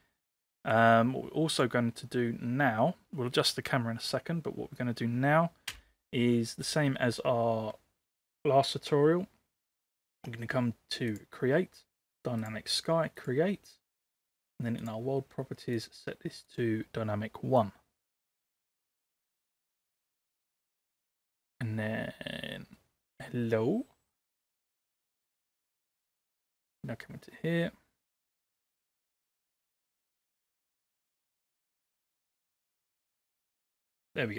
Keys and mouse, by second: 0.8-5.5 drag, 5.7 n, 13.3 click, 16.5 click, 25.8 click, 31.3 click, 31.9-32.7 drag.